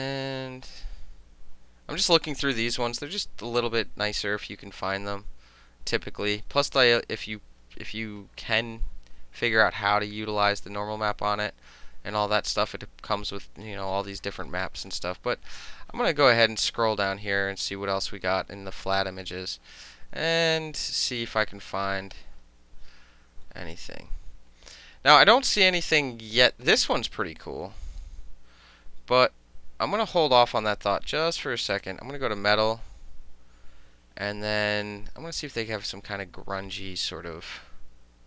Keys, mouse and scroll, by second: 0.4 click, 1.3 click, 6.2 middle click, 6.9 middle click, 9.5-11.2 drag, 11.4-12.2 drag, 14.6 click, 15.4 click, 15.6 click, 17.7 click, 18.8 click, 23.5 click, 23.8 click, 24.2 click, 24.5 click, 24.9 click, 25.9 click, 31.8 click, 37.5 middle click, 38.1 middle click.